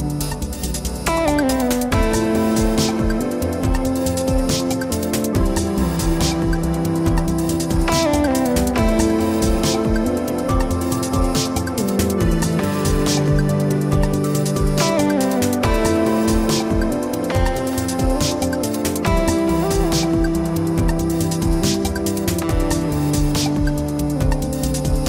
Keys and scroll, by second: 0.9 ctrl+p.